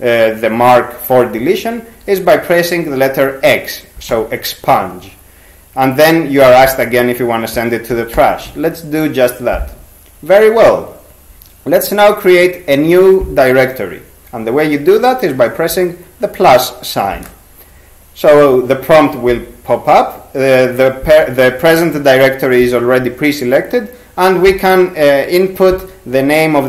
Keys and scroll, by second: 4.1 x, 8.2 y.